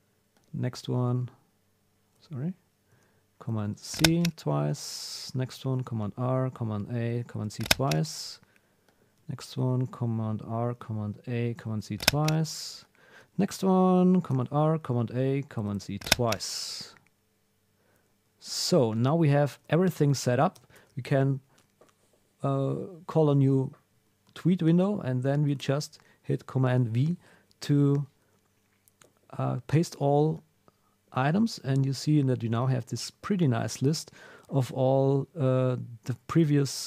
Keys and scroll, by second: 0.9 super+a, 2.1 super+r, 2.9 super+a, 3.5 super+c, 4.4 super+w, 5.7 super+r, 6.4 super+a, 7.2 super+c, 8.1 super+w, 9.6 super+r, 10.6 super+a, 11.6 super+c, 12.4 super+w, 14.3 super+r, 14.9 super+a, 15.6 super+c, 19.5 super+w, 20.7 super+n, 25.5 super+v, 33.3 super+Left.